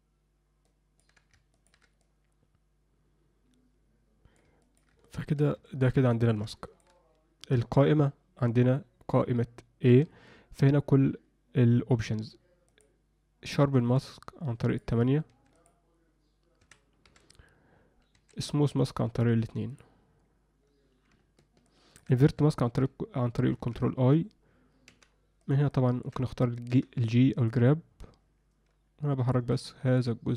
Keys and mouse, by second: 0.9 ctrl+alt+middle click, 1.5 ctrl+middle click, 2.0-4.4 drag, 4.6 ctrl+alt+middle click, 5.0 middle click, 5.6 shift+middle click, 6.1 ctrl+alt+middle click, 6.6 shift+middle click, 9.8 a, 13.8 a, 21.6 ctrl+middle click, 23.6 ctrl+i, 24.8 f, 25.7 alt+middle click, 27.4-29.3 drag, 27.4 g, 29.5 alt+middle click.